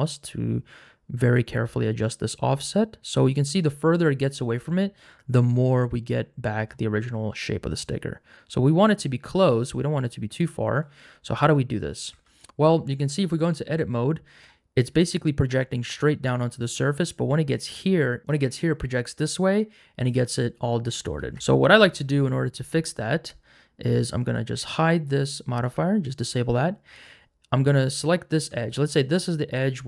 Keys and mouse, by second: 7.7-9.6 shift+drag, 12.1 Tab, 18.5 click, 21.2 ctrl+z, 24.3 click, 27.6 2, 28.3 alt+click.